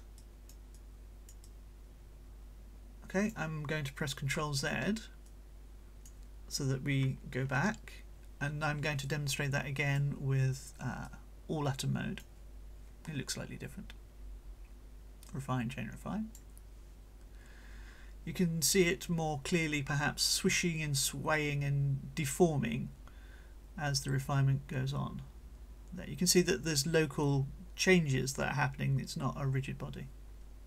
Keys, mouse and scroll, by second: 0.2-0.7 ctrl+shift+drag, 0.7 right click, 1.4-3.4 scroll up 1, 3.4 scroll up 1, 5.3-6.3 right drag, 7.4 ctrl+z, 9.0-10.2 right drag, 11.0-12.4 drag, 15.2-16.5 drag.